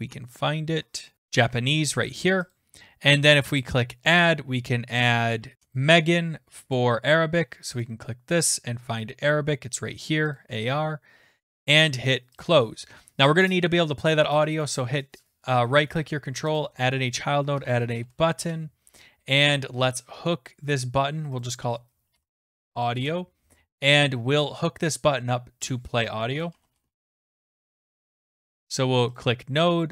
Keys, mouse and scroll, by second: 0.2-1.9 scroll down 26, 1.1-1.9 scroll up 9, 2.0-2.5 scroll, 2.6 click, 5.0 click, 5.8 click, 6.8 click, 7.9 click, 10.4 click, 12.5 click, 14.6 right click, 16.6 click, 17.3-18.6 typing, 18.5 middle click, 21.4 click, 21.6 click, 22.0-23.4 typing, 25.7 click, 26.1-28.1 typing, 29.2 click.